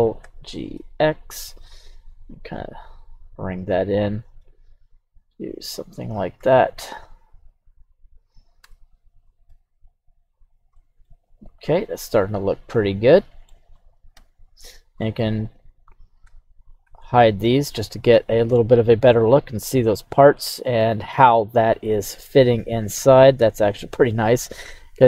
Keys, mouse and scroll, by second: 0.2 g, 0.7 x, 3.5 click, 4.1 s, 4.4 x, 5.9 click, 6.4 g, 6.7 x, 7.8 click, 8.6 Tab, 9.5 ctrl+a, 10.7-11.7 scroll down 2, 10.7-11.1 middle drag, 11.8 right click, 12.1-13.5 middle drag, 14.1 KP_3, 14.9 scroll down 1, 15.0-15.4 middle drag, 15.4 right click, 16.2 h, 16.8 h, 17.3-17.8 middle drag, 18.1-18.5 scroll up 3, 18.5-20.9 middle drag, 21.2 right click, 22.2 g, 23.0 right click, 23.4-24.1 middle drag, 24.4 scroll up 1, 24.7-25.0 middle drag.